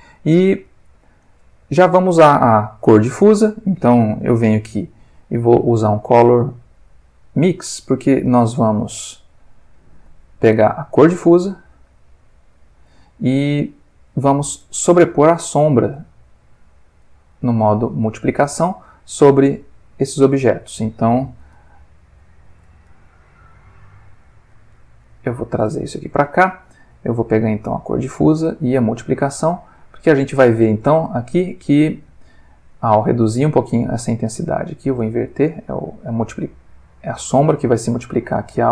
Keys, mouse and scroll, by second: 1.2 ctrl+click, 3.0 ctrl+middle click, 5.0 shift+a, 7.2 click, 9.8 click, 10.6-12.9 drag, 13.1 middle click, 13.7 ctrl+middle click, 14.6 click, 15.5-16.7 drag, 17.0 click, 17.9 click, 18.6 ctrl+shift+click, 19.0 ctrl+shift+middle click, 19.6-20.1 ctrl+shift+drag, 21.5 alt+click, 22.8 alt+click, 24.2-24.8 alt+middle drag, 25.3-26.1 alt+middle drag, 27.7-28.8 drag, 29.0 click, 30.2 click, 31.5 ctrl+middle click, 32.7-33.5 drag, 33.9 click, 34.7 click, 36.4-36.9 drag, 37.0-37.6 drag, 37.7-38.4 drag.